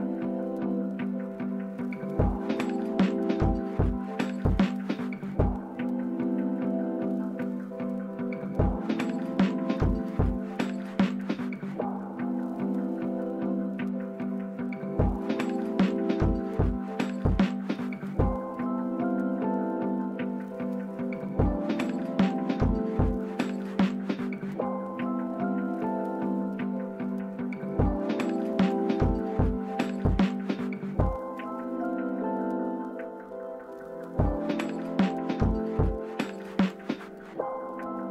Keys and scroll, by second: 4.0-5.6 typing, 8.4 p, 12.5-14.1 typing, 16.2 typing, 23.7 typing, 36.2 v.